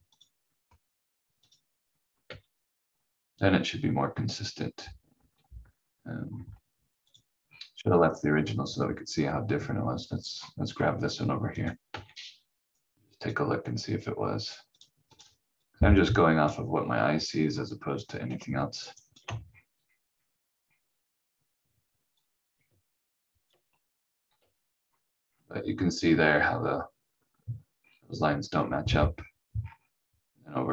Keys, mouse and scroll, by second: 1.8 scroll down 1, 2.2 v, 6.2 scroll up 1, 7.0 click, 7.4-7.7 scroll down 1, 10.3-10.6 scroll up 1, 11.5 click, 11.9 v, 12.7 click, 16.7 scroll down 1, 18.3 click, 18.9 ctrl+right click, 19.5-20.0 scroll up 1, 22.1 click, 24.3 v, 24.8 scroll up 1, 27.8-28.1 scroll down 1, 29.6 scroll up 1.